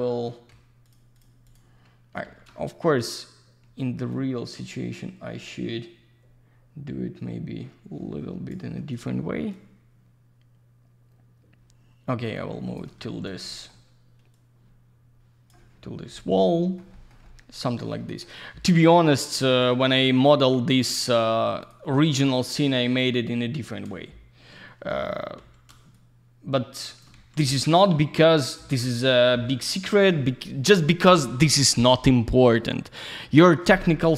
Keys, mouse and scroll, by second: 0.8 ctrl+click, 1.5 ctrl+double click, 2.2 w, 4.1 shift+click, 9.5 shift+click, 13.4 middle click, 14.3 click, 15.9 scroll down 1, 16.1 alt+middle click, 16.9 middle click, 18.0 middle click, 19.5 click, 20.1 ctrl+click, 21.6 ctrl+click, 22.2 ctrl+click, 25.9 shift+click, 27.8 click, 32.3 click, 32.8 click, 32.9 double click, 33.3 alt+middle click.